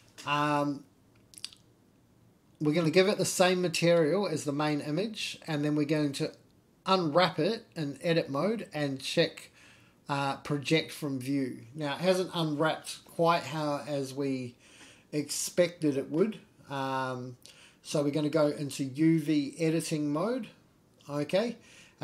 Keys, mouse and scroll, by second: 0.7 click, 1.7-3.5 drag, 4.0-4.4 scroll up 3, 4.5-4.8 shift+middle drag, 5.2-5.5 scroll down 2, 5.5 shift+middle drag, 5.9 Tab, 7.2 u, 12.9-13.4 scroll down 2, 13.4-14.0 scroll up 1, 14.0-14.9 scroll up 1, 14.9-15.4 scroll down 1, 15.4 scroll up 1, 16.2 shift+middle click, 17.0-18.0 scroll down 1, 18.2 Tab, 18.6 Tab.